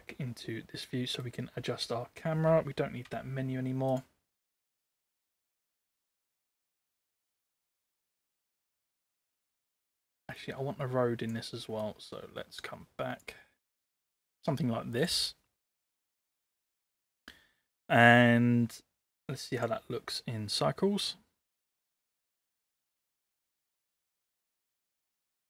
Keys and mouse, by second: 0.9 middle click, 3.1 n, 3.9 click, 7.1-9.5 drag, 10.4 click, 11.8-13.4 drag, 13.6 click, 15.0 click, 19.5 click.